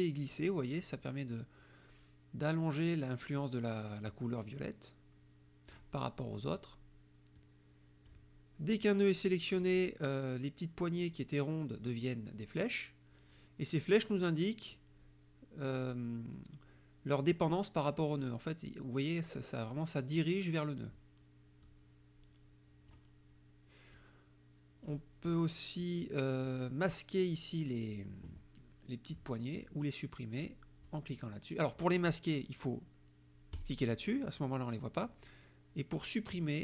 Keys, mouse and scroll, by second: 7.5 click, 9.6 click, 21.7-23.2 drag, 24.0 click, 25.9 click, 29.7 click, 33.6 click, 35.1 click.